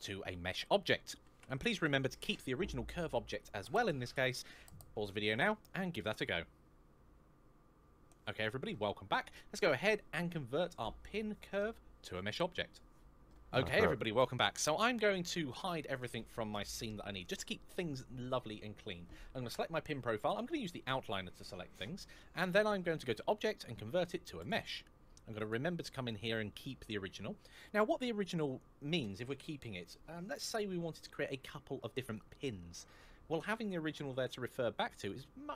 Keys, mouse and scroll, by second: 19.3 click, 22.8 click, 25.2 click.